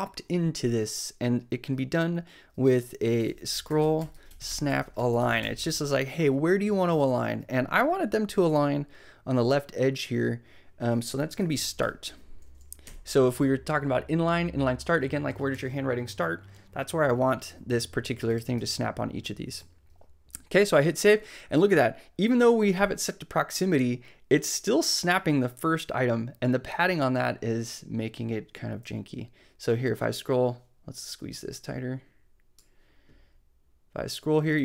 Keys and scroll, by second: 2.9-5.9 typing, 11.1-12.3 typing, 12.8 Right, 18.5 super+s.